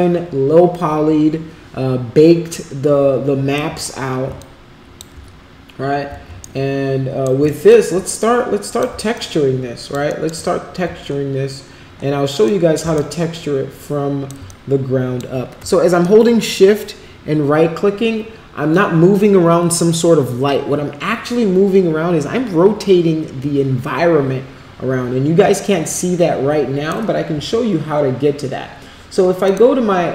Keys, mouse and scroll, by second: 4.3 alt+click, 6.4 shift+right click, 7.4 alt+click, 8.6 click, 9.1 alt+click, 10.0 alt+middle click, 12.4 alt+click, 12.9-14.2 shift+right drag, 14.4 alt+click, 16.0-26.9 shift+right drag, 29.4 click.